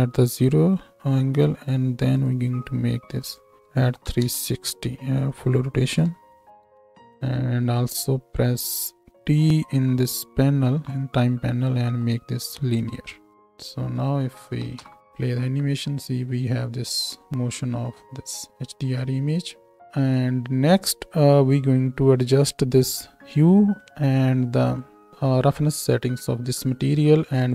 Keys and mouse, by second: 0.6 i, 6.0 KP_3, 10.7 t, 14.6 shift+Right, 14.8 shift+Left, 15.0 space, 18.5 space, 18.9 space, 19.8 space, 24.8-27.4 middle drag, 27.4 click.